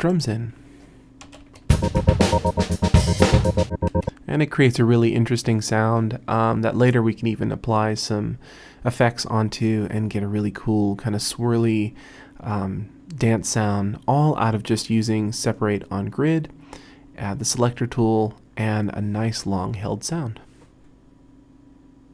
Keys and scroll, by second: 1.3 Return, 1.5 space, 3.9 space.